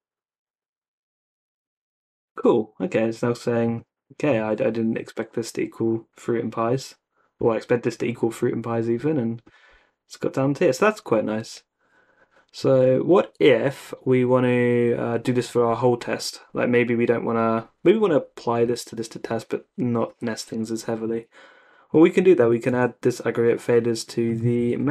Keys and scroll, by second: 18.6 x, 20.1 x, 22.7 super+c, 24.6-24.9 typing.